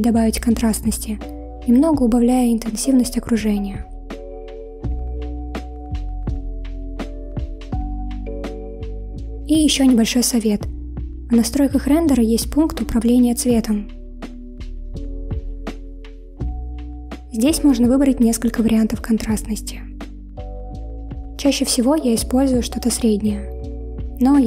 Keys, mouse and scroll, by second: 0.0 click, 3.3-7.1 drag, 10.9 click, 13.7-16.4 scroll down 6, 16.4-17.3 drag, 17.3-17.7 scroll down 5, 21.3-24.4 drag.